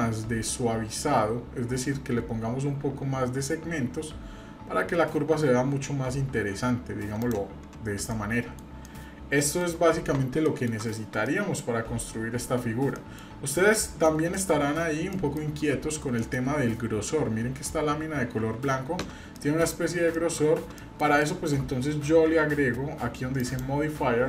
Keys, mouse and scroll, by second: 8.1 middle click, 8.8 middle click, 10.4 middle click, 10.7 Tab, 11.2-12.4 middle drag, 12.7-13.3 scroll down 2, 12.9 middle click, 13.8 middle click, 15.1-15.5 shift+middle drag, 15.6-16.2 scroll up 3, 16.2 shift+middle click, 19.3 middle click, 20.1 shift+middle click, 20.8 middle click, 21.2-21.6 shift+middle drag, 23.4 click.